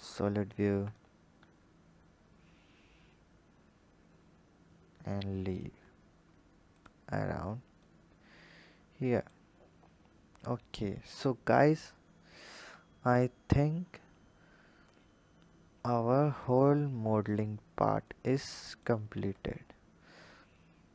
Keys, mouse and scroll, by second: 0.8 click, 6.2-6.6 scroll down 2, 6.6 click, 7.6 click, 9.3-10.2 scroll down 4, 10.2 click, 16.6-17.1 scroll up 2, 17.1 click, 17.9 click, 19.0 Tab, 19.6-20.8 scroll up 1, 20.8-20.9 drag.